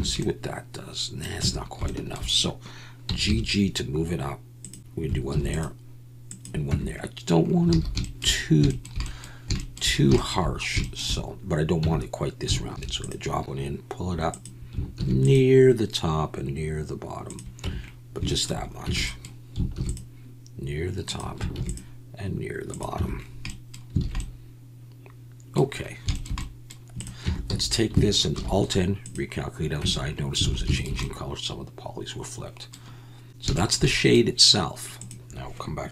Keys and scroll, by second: 1.4 Tab, 3.0 g, 3.2 g, 5.3 ctrl+r, 6.7 Tab, 7.7 alt+a, 8.2 ctrl+r, 11.8 Tab, 12.7 ctrl+r, 14.9 ctrl+r, 17.6 Tab, 18.8 Tab, 19.7 ctrl+r, 21.5 ctrl+r, 23.0 Tab, 24.0 alt+a, 27.2 Tab, 27.5 a, 28.3 alt+n, 29.8 Tab, 30.4 alt+a, 30.5 alt+n, 30.8 alt+n.